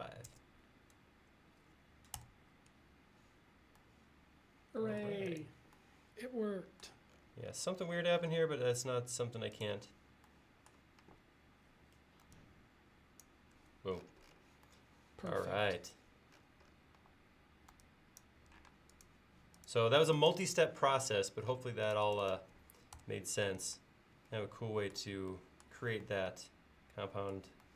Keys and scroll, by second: 0.0-0.3 typing, 2.2 Return, 11.0 e, 15.7 space, 17.0 e, 18.7 space, 23.0 BackSpace.